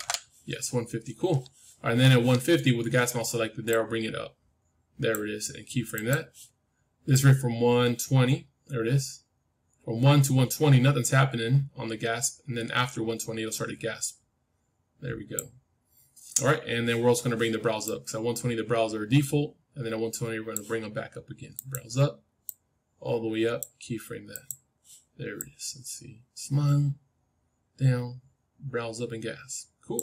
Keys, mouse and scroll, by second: 3.6-5.6 drag, 5.9-9.1 drag, 17.7-20.4 drag, 21.5-27.4 drag.